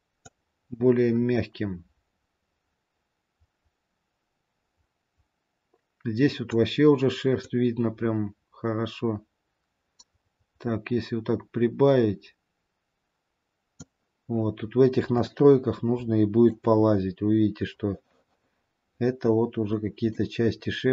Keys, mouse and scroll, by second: 0.6 click, 7.8 click, 15.4 shift+middle click, 17.2-18.7 scroll up 2, 19.3-20.5 scroll down 3, 20.5 middle click, 20.5-20.9 scroll down 1.